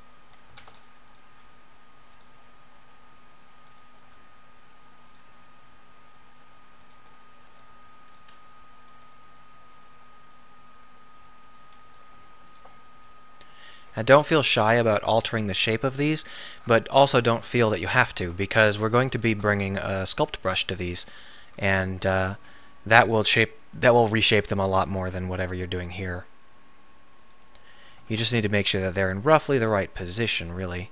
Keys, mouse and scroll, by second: 0.6 shift+d, 0.8 middle click, 1.3 r, 2.3 g, 4.1 r, 5.2 g, 7.6 r, 8.9 g, 12.5-13.0 middle drag, 13.5 t, 13.9 g, 19.8-21.1 middle drag, 20.2 g, 21.6 shift+d, 22.4 g, 23.9 g, 25.0 r, 26.1 g, 28.1 shift+d, 29.3 r, 30.2 g.